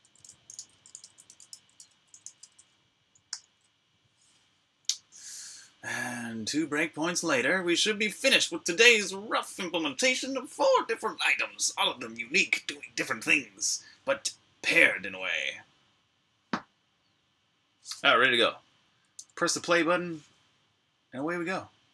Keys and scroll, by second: 0.0-1.9 typing, 3.1 super+\, 3.8-5.7 typing, 7.3 Return.